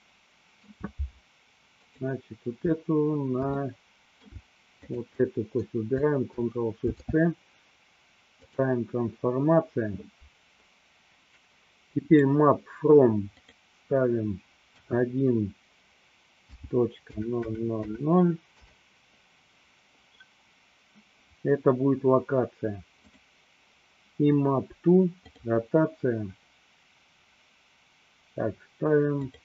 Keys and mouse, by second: 0.1 shift+middle click, 1.9 click, 3.6-5.0 middle drag, 5.0 shift+click, 5.4 shift+middle click, 6.7 ctrl+shift+c, 12.1 click, 13.5-19.3 drag, 17.5 KP_0, 25.5 click, 29.2-29.4 drag.